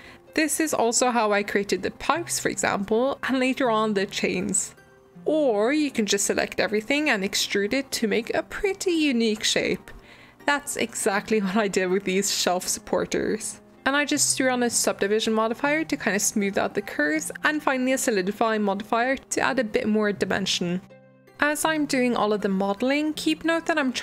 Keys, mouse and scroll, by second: 0.0-1.3 middle drag, 1.3 g, 3.0 click, 3.1 g, 5.1 middle click, 5.3 Tab, 5.6 e, 8.1 middle click, 8.8 g, 9.6 middle click, 9.7 scroll up 10, 10.0-13.1 middle drag, 18.0 click, 18.4 click, 18.9 click, 19.5 click, 20.2 click, 20.6 click, 21.7 click, 22.3 click, 22.9 click, 23.5 click.